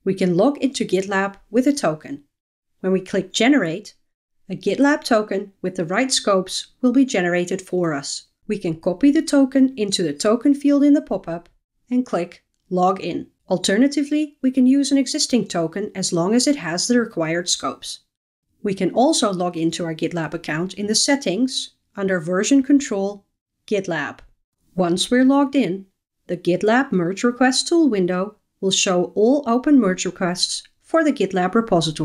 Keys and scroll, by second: 11.6 super+v, 22.1 super+v.